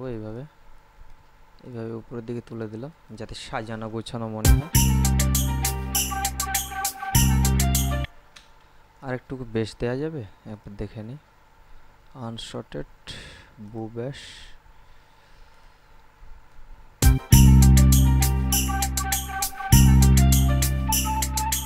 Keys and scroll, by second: 4.6 space, 8.3 space, 17.2 space.